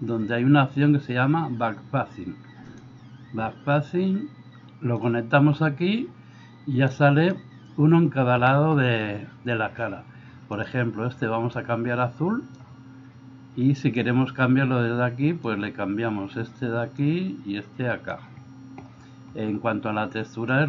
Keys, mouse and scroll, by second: 2.8-5.1 drag, 6.9-8.6 drag, 8.6 middle click, 10.7-12.7 drag, 14.0-15.5 drag, 17.0-18.2 drag, 20.6 click.